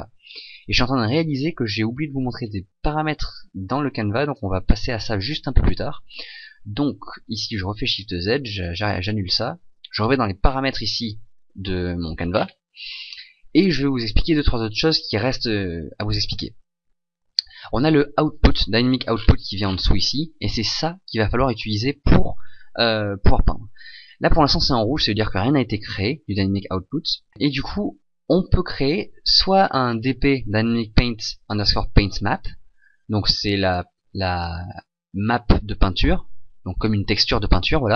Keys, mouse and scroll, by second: 5.1 click, 7.8 shift+z.